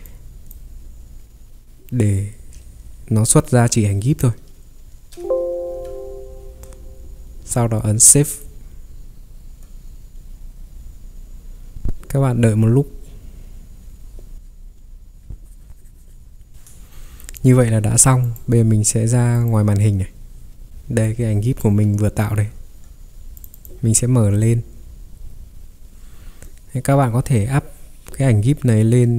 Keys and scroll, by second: 5.6 Escape, 5.9 Escape, 5.9 ctrl+3, 20.7 ctrl+3, 22.3 Escape, 22.6 ctrl+3.